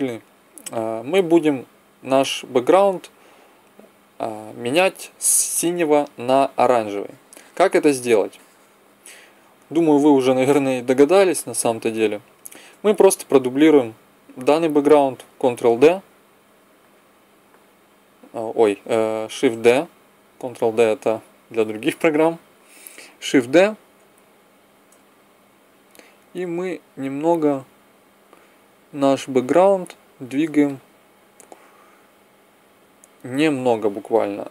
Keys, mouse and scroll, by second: 9.5 middle click, 11.4-14.1 right drag, 14.1 click, 15.8 ctrl+d, 19.3 shift+d, 20.4 click, 24.0-25.6 drag, 32.2 middle click, 34.3 middle click.